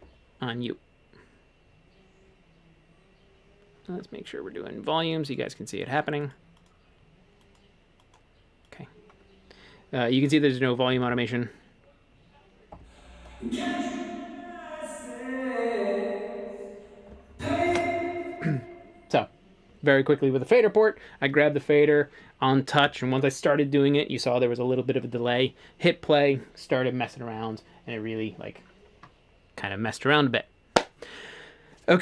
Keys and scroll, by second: 17.7 space.